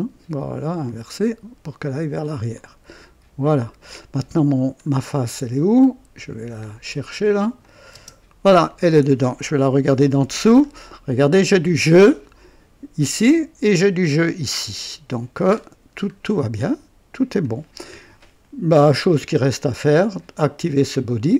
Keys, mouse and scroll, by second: 0.8 click, 2.5 click, 4.5 scroll down 1, 6.1 click, 6.7 scroll down 1, 7.6 click, 7.9 space, 8.6-9.2 drag, 9.8 KP_5, 10.4 scroll up 1, 10.9 right click, 10.9-12.6 typing, 11.1 scroll down 1, 11.1 right click, 11.6 scroll up 1, 12.0 right click, 15.5-16.1 scroll down 2, 16.5-17.5 drag, 20.1 click.